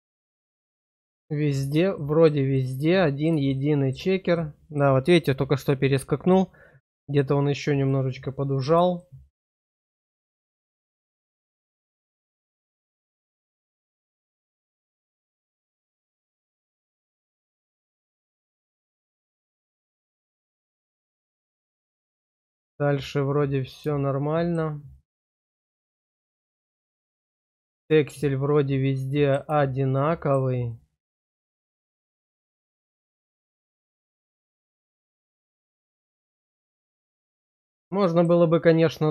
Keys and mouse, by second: 0.0 shift+middle click, 0.8 middle click, 1.9 shift+middle click, 2.6 middle click, 3.6 shift+middle click, 4.4 middle click, 7.8 middle click, 9.0 shift+middle click, 10.0-15.4 middle drag, 15.8 shift+middle click, 16.6-18.7 middle drag, 19.0 shift+middle click, 19.9-21.4 middle drag, 21.6 shift+middle click, 22.3-23.8 middle drag, 24.1 shift+middle click, 25.0-26.6 middle drag, 26.9 shift+middle click, 27.6 middle click, 30.0 shift+middle click, 30.7-31.7 drag, 32.0 shift+click, 32.7-33.8 drag, 34.2 shift+middle click, 34.9-36.0 middle drag, 36.2-37.8 middle drag, 38.0 shift+middle click.